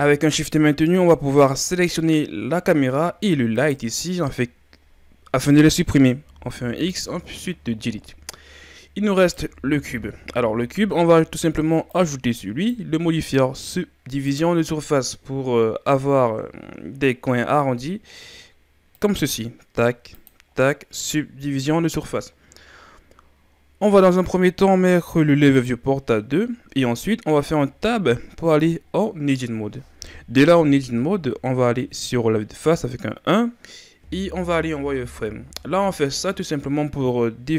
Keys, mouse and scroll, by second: 1.1-3.5 middle drag, 3.5 shift+right click, 9.2 right click, 11.9-14.4 drag, 20.3-22.0 drag, 22.8-25.6 scroll up 7, 25.6-27.5 drag, 27.5 Tab, 30.4 KP_1, 35.3 z.